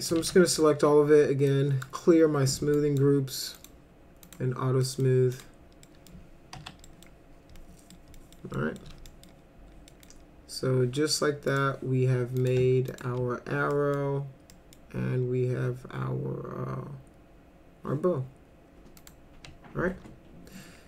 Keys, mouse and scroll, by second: 0.0 click, 0.2 ctrl+a, 1.5 click, 2.8 click, 3.5 click, 4.3 click, 4.8 middle click, 5.3 click, 5.9 middle click, 6.6 F4, 6.8 middle click, 7.6 middle click, 8.2 middle click, 8.5 middle click, 9.1 middle click, 9.9 middle drag, 11.5 click, 12.4 click, 12.9 ctrl+click, 13.7 middle click, 14.5 middle click, 19.0 click.